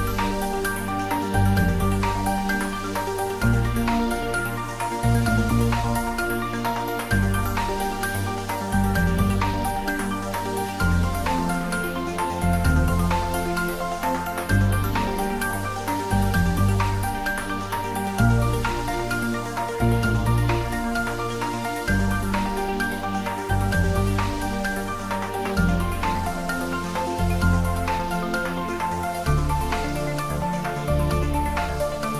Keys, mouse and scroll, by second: 0.7 g, 1.0 z, 4.3 click, 5.1 shift+z, 8.0 shift+z, 9.0 click, 10.2-11.1 scroll down 1, 11.1-13.9 drag, 14.0 shift+d, 15.0-16.4 typing, 23.1 Right, 24.2 click, 24.9 scroll down 1, 25.5-27.1 middle drag, 27.1-27.4 scroll up 1, 27.7 shift+z, 28.9-29.4 scroll up 1, 29.8 Tab, 30.6-31.0 scroll up 1, 31.0-32.1 middle drag.